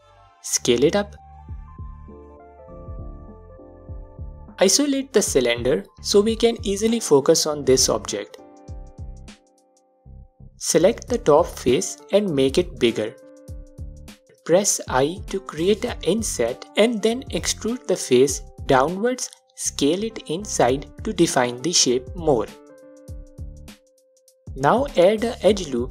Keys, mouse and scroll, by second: 0.0 KP_Enter, 0.0-2.1 drag, 0.6 s, 2.9-5.8 alt+drag, 5.7 KP_Divide, 5.9 click, 6.9-7.3 scroll down 2, 7.3 Tab, 7.9-9.3 alt+drag, 9.3-10.5 middle drag, 10.0 3, 10.5 click, 11.5 s, 13.8 click, 17.7 i, 17.8 click, 18.4 e, 21.1 click, 21.5 s, 22.6 click, 22.9 scroll down 1, 23.4-25.9 alt+drag, 24.5 scroll up 1.